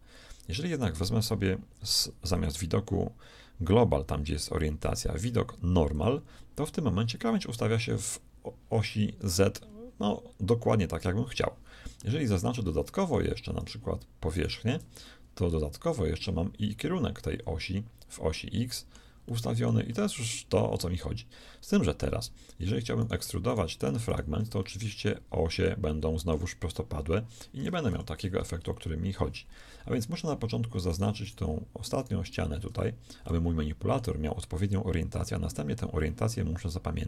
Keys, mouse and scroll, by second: 2.2-4.1 drag, 12.0 middle click, 13.5 click, 13.5-16.2 right drag, 15.0-16.2 drag, 18.3-21.6 middle drag, 22.9-24.6 shift+right drag, 24.6-26.3 shift+middle drag, 25.6 click, 25.6 right click, 27.9 ctrl+KP_3, 29.9-31.0 middle drag, 30.8 click, 30.8 right click, 34.2-35.2 middle drag.